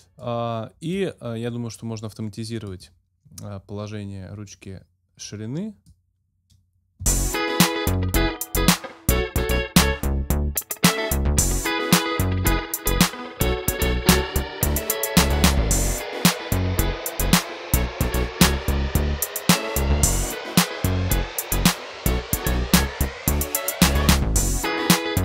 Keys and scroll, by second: 7.1 space.